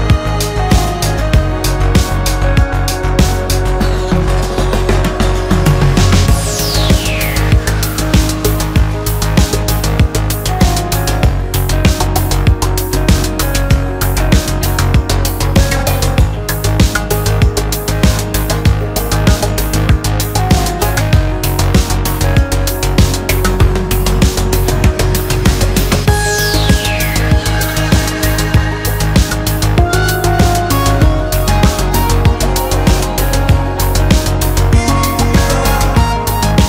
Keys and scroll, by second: 1.5 Return, 2.0 Escape, 2.5 alt+7, 2.8 alt+a, 7.6 Escape, 10.9 Return, 13.1 Return, 17.7 Return, 19.5 Escape, 23.8 F2, 25.1 Return, 28.3 ctrl+1, 29.5 Escape.